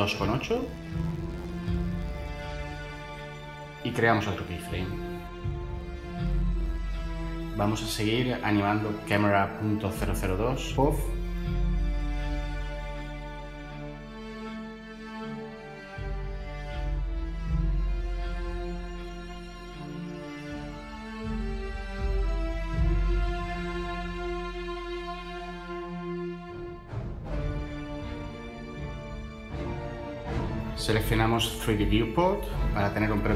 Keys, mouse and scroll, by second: 11.9 i, 16.9 i.